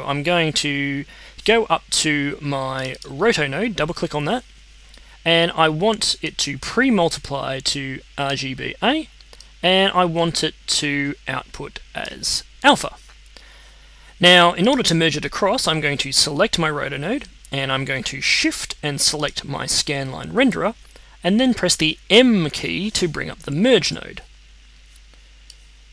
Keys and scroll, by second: 23.8 m.